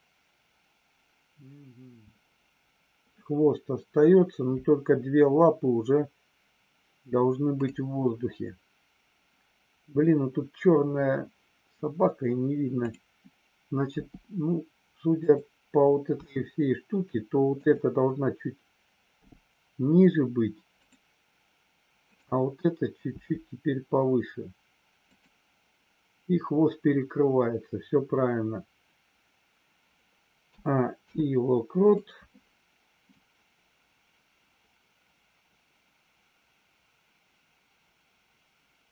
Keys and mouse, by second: 12.7 click, 15.1 click, 16.1 r, 17.5 click, 19.3 g, 20.7 click, 25.0 click, 31.0 i, 33.1-38.9 drag.